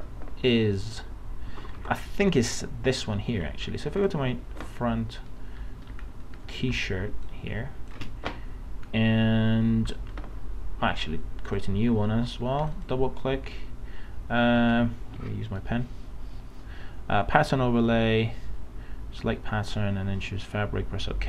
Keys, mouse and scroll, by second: 1.5 alt+Tab, 4.0 click, 5.3 alt+scroll up 1, 5.9 alt+scroll up 1, 7.1 alt+space, 7.3 click, 7.7 space, 8.9-9.2 alt+scroll up 1, 11.5 click.